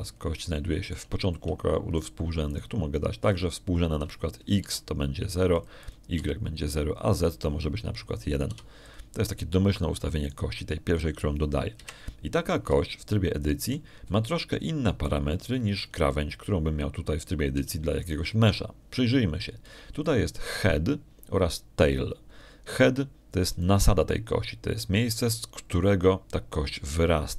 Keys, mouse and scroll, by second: 0.1 click, 0.6 0, 0.8 click, 2.0 middle click, 4.3 middle click, 5.2 click, 6.5 0, 7.4 click, 8.0 0, 8.3 click, 8.8 click, 9.6 click, 10.3 1, 10.7 click, 12.1 right click, 13.7 1, 14.9 shift+click, 15.9-17.1 shift+drag, 19.1-19.4 scroll down 1, 19.6 shift+click, 25.4 right click.